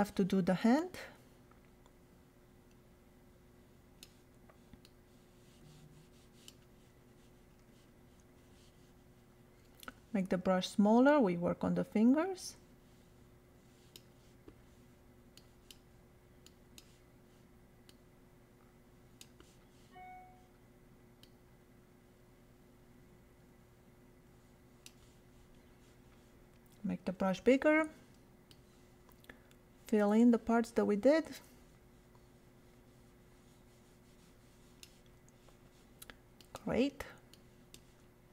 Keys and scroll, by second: 9.7 [, 27.2 ].